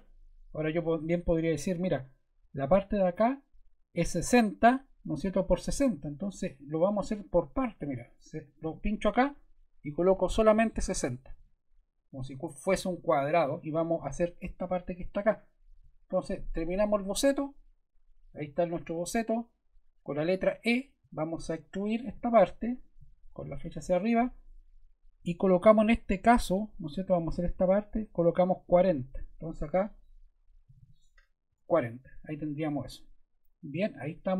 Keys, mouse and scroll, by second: 7.8 ⟲, 8.4 click, 8.6 click, 10.3-11.2 typing, 11.3 Return, 16.9 click, 21.0 e, 21.8 click, 22.7 click, 23.6 click, 30.4-31.3 typing, 31.5 Return.